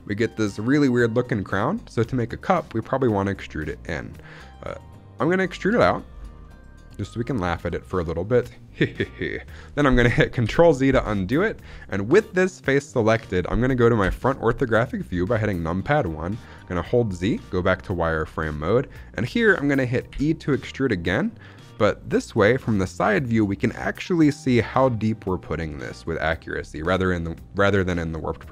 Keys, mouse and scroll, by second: 5.5 click, 6.0 scroll down 2, 6.3-7.5 middle drag, 7.7 shift+middle click, 10.4 ctrl+z, 13.9 KP_1, 15.0-15.4 scroll up 2, 15.4 shift+middle click, 16.7 z, 20.1 e.